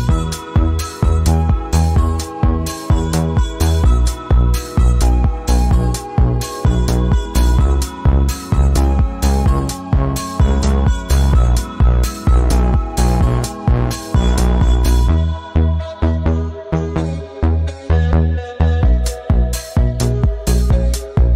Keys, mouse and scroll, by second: 0.6-1.6 drag, 4.6-6.4 drag, 13.7 ctrl+2, 14.5 click, 16.1 click, 17.8 click, 18.0 ctrl+2, 20.4 click, 20.9 click.